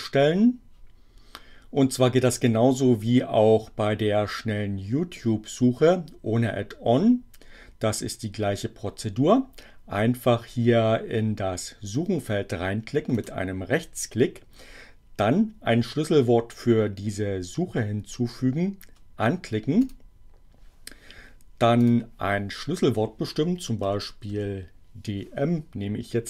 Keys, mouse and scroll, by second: 13.2 right click, 19.8 click, 21.8 click, 23.8 d, 24.3 m.